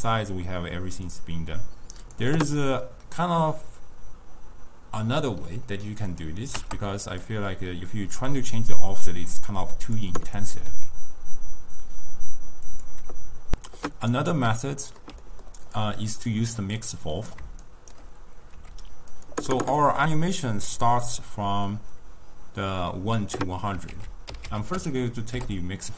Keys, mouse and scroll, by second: 5.2-10.4 drag, 10.8 s, 14.3-15.8 middle drag, 15.8 click, 16.9-17.7 drag, 17.7 shift+right click, 18.6 g, 20.4 click, 21.3-24.0 middle drag, 24.0 ctrl+a.